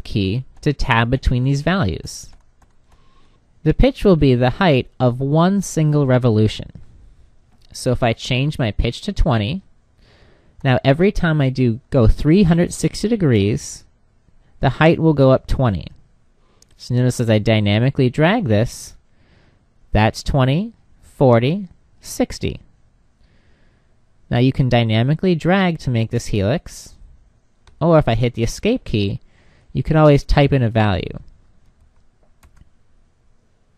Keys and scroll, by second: 27.1 Escape.